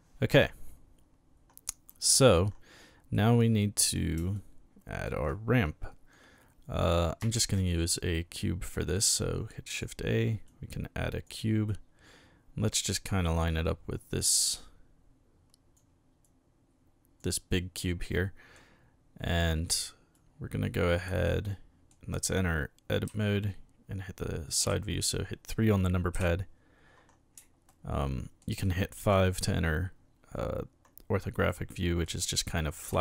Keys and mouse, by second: 1.9-2.3 middle drag, 3.2-4.0 middle drag, 4.4-5.0 shift+middle drag, 7.3 shift+a, 9.7 click, 10.5-11.2 drag, 11.7-12.7 drag, 13.3 click, 16.2-17.2 drag, 18.1-18.5 middle drag, 19.3-19.7 middle drag, 20.1-21.0 drag, 21.3-21.9 middle drag, 23.1 KP_1, 24.6 KP_3, 26.1 KP_5, 27.7-28.4 shift+middle drag, 28.7-29.0 shift+middle drag, 31.5-32.1 middle drag, 32.8 KP_3.